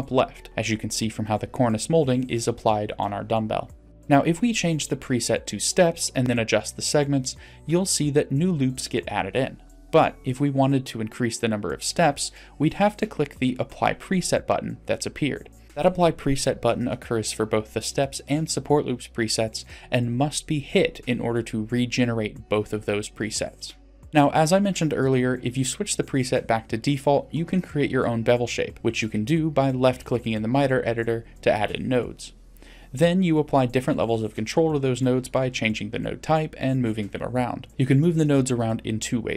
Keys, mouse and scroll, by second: 1.1-2.1 middle drag, 3.8-5.6 drag, 6.5 middle click, 7.2 middle click, 9.2 click, 14.4 click, 16.4-16.8 middle drag, 19.6 click, 21.6 click, 22.3 middle click, 23.3-23.7 shift+middle drag, 26.2 click, 27.9-28.9 drag, 31.0-32.1 drag, 34.9 click, 36.5 click.